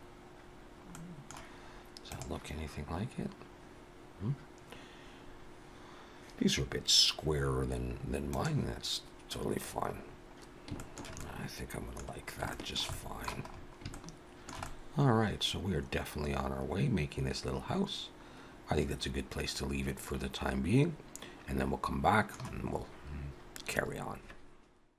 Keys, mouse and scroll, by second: 1.0 middle click, 1.0-1.3 scroll down 2, 9.7-10.0 scroll up 2, 10.0 scroll down 1, 10.3 scroll down 3, 10.8 shift+middle click, 11.2 middle click, 12.1-12.5 scroll down 2, 12.5 shift+middle click, 12.9 middle click, 13.5-13.9 scroll up 4, 13.9 shift+middle click, 14.7 middle click.